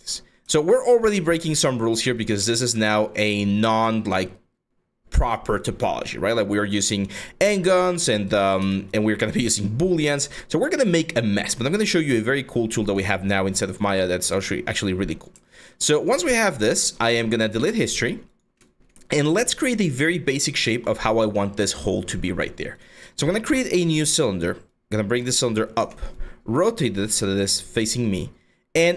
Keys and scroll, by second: 3.4 4, 8.2 4, 11.6-12.4 typing, 18.7 4, 23.1 w, 25.4 e.